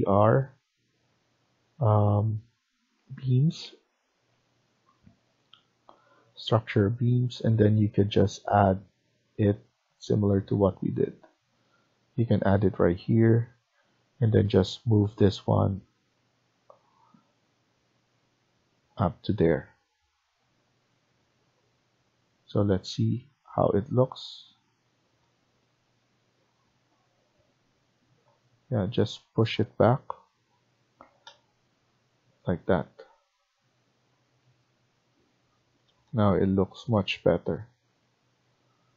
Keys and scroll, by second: 14.0 Escape, 14.2 Escape, 19.4 Escape, 30.9 Escape.